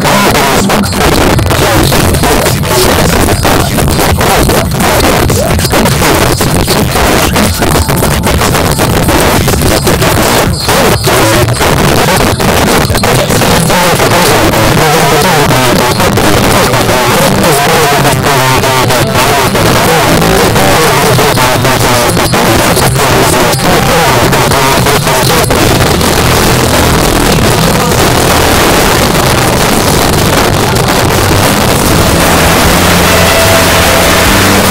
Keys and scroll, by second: 31.3 typing.